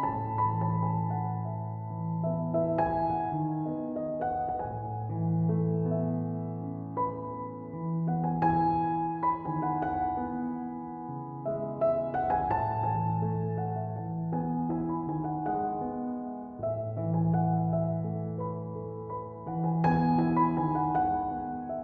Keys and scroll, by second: 16.8 typing.